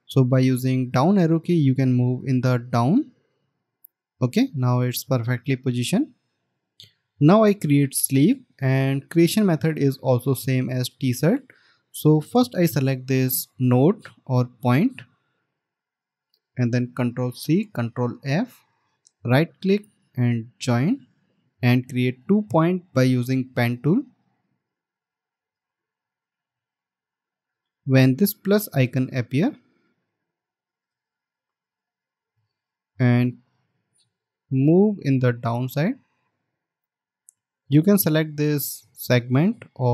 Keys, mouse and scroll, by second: 3.3 Down, 17.7 ctrl+c, 19.0 ctrl+f, 19.5 right click, 25.5 right click, 35.7 alt+scroll down 1, 36.6 alt+scroll up 1.